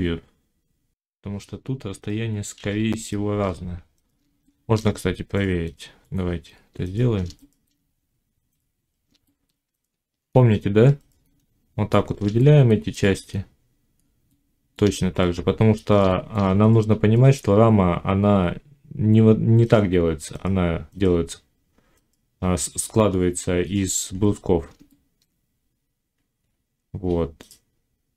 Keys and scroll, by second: 2.4 1, 5.3 Tab, 9.6 Tab.